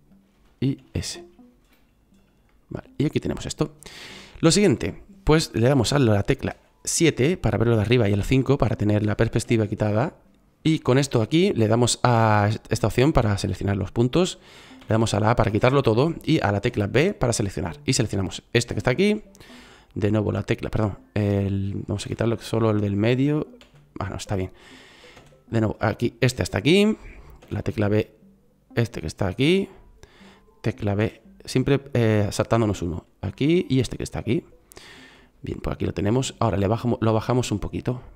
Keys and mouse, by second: 0.7 s, 6.4 KP_7, 7.9 KP_5, 14.7 a, 16.6 b, 21.9 a, 23.5 a, 25.1 b, 27.3 b, 31.5 b, 33.1 b.